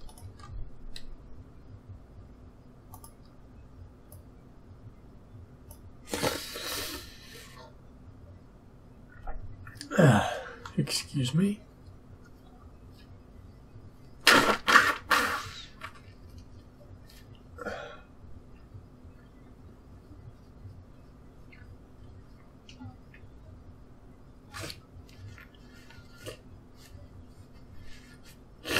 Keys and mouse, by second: 1.0-2.1 drag, 1.0 s, 4.1-5.9 drag.